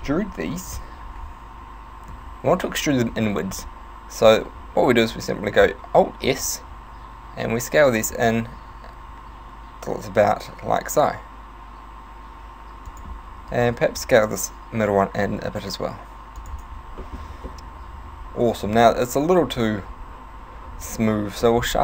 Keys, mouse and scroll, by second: 2.2 e, 4.4 right click, 6.2 alt+s, 13.0 click, 13.6 alt+right click, 14.0 s, 16.5 click, 17.0 shift+middle click, 17.4 Tab, 17.6 middle click, 21.1 Tab, 21.4 middle click, 21.6-21.8 scroll up 5.